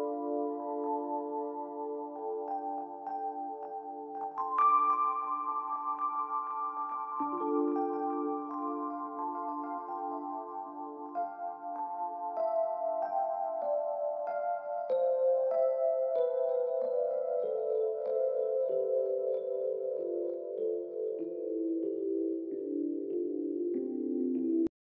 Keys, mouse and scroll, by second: 0.3 double click, 0.5 space, 1.0 alt+scroll, 1.1 alt+scroll down 1, 1.3 space, 6.9 space, 11.4 double click, 14.8 alt+scroll down 1, 15.2 space, 16.2 ctrl+0, 21.7 space.